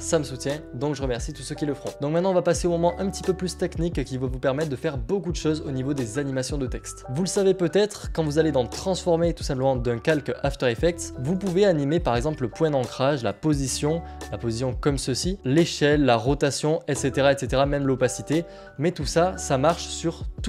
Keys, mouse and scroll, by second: 7.0 click, 11.8 click, 14.9 click, 16.0 click, 18.3 click, 18.3 click, 20.3 ctrl+z.